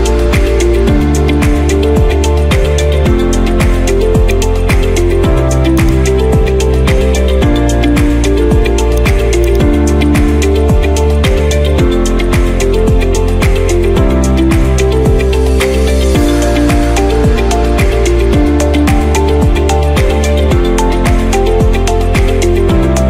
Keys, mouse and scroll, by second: 0.0-0.5 typing, 1.6 scroll down 1, 1.6-1.9 scroll down 1, 1.9 middle drag, 1.9 scroll, 1.9 scroll down 1, 2.0 scroll down 1, 2.1 scroll down 1, 2.3 middle click, 2.3 scroll down 1, 2.4 scroll down 1, 2.6 scroll, 4.4 click, 5.9 click, 6.3 scroll, 6.8 middle click, 7.1 scroll, 8.0 scroll, 9.6 click, 11.5 scroll, 13.6 middle click, 14.0 scroll down 2, 14.3 scroll up 2, 15.2 scroll down 1, 15.9 middle click, 16.2 scroll down 1, 16.4-16.9 scroll up 1, 17.0-17.4 scroll, 19.3 middle click, 19.8 scroll, 20.8 middle click, 21.7 middle click, 21.7-22.2 scroll.